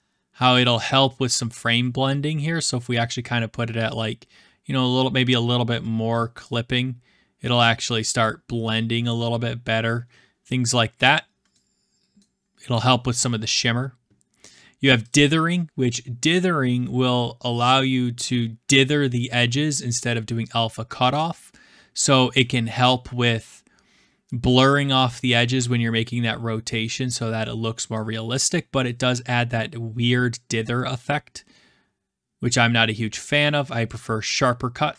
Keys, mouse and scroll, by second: 5.9 click, 9.8 middle click, 10.8 middle click, 11.0 click, 12.1 middle click, 15.1 click, 22.3-23.4 middle drag, 28.8-29.9 middle drag, 33.2 click.